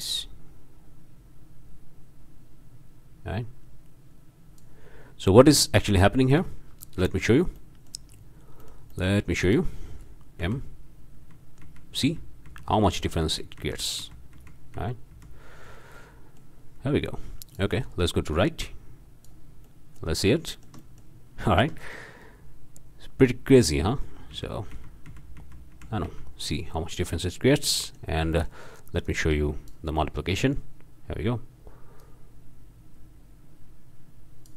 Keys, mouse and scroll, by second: 5.0-6.4 drag, 7.6 click, 8.1 scroll up 2, 8.6 scroll down 2, 8.6 click, 8.7 scroll up 2, 9.4 click, 10.4 m, 11.2 m, 15.6 drag, 16.0 click, 17.5 drag, 18.3-19.5 drag, 19.6-20.2 drag, 20.2 middle click, 20.5 shift+middle click, 20.6-21.4 shift+drag, 21.5 shift+click, 22.0 shift+click, 23.5 click, 24.3 m, 26.7 middle click, 26.7 scroll down 1, 26.9 click, 27.5 click, 28.3 drag, 29.0 click, 30.0-30.7 drag, 32.0-34.5 drag.